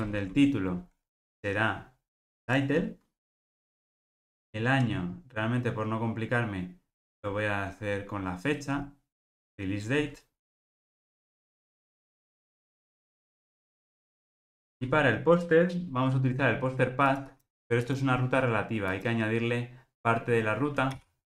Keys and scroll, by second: 3.8 Return, 11.7 Return, 14.7 super+p, 20.9 super+v.